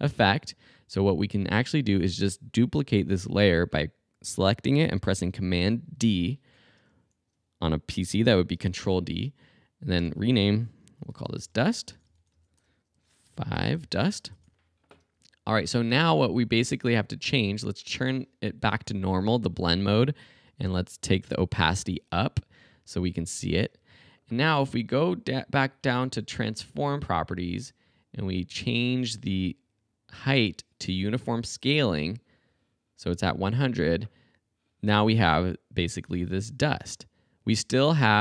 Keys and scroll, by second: 5.9 super+d, 10.0 Return, 10.8-14.7 typing, 20.7 t, 36.1 space.